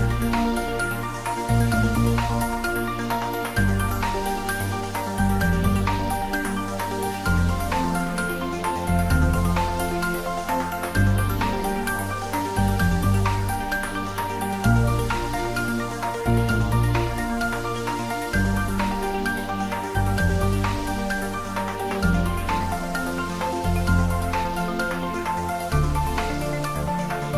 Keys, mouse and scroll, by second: 1.5 alt+shift+click, 3.8 alt+shift+click, 6.7 scroll up 1, 8.2 click, 11.9 alt+shift+click, 15.9 alt+shift+click, 20.0 alt+shift+click, 20.9 alt+shift+click, 21.5 ctrl+z, 24.4 ctrl+z, 27.1 alt+shift+click.